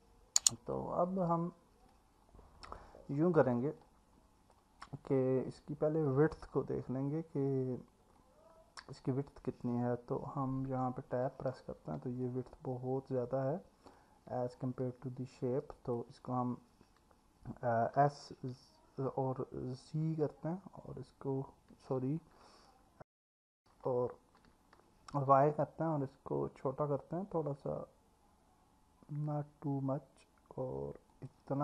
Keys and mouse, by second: 0.0 alt+middle click, 1.9 click, 3.8 alt+middle click, 5.5 click, 8.2 alt+middle click, 10.7 Tab, 12.2-14.0 alt+middle drag, 15.4 click, 18.0 s, 20.0 z, 22.2 Escape, 24.4 s, 25.2 y.